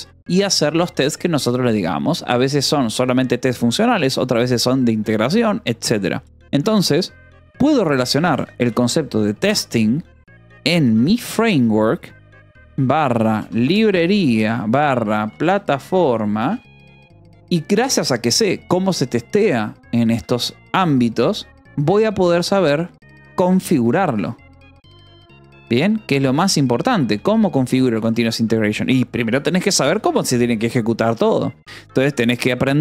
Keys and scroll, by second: 7.9-8.8 typing, 10.2-16.5 typing, 16.7 Escape, 18.2 shift+v, 20.0 Escape, 20.4-27.4 typing, 26.4 Return, 27.6 Escape, 28.5 ctrl+s, 29.8 j, 30.5 shift+v, 31.0 Escape, 32.4 l.